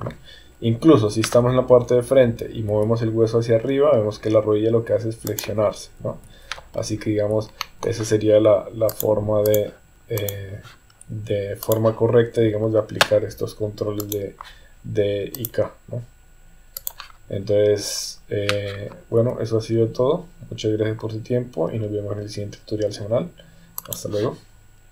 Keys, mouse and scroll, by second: 0.6 KP_1, 2.7 g, 6.0 KP_3, 7.6 shift+middle click, 8.9 click, 10.2 click, 11.6 click, 14.0 click, 15.3-16.9 drag, 19.1 g.